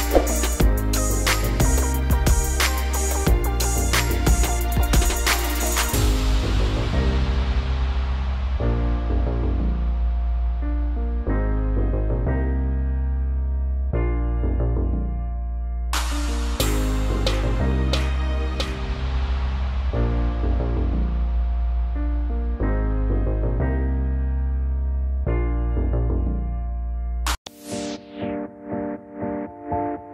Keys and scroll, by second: 1.2 Left, 4.0 Left, 5.1 Right, 5.6 Down, 24.1 ctrl+z.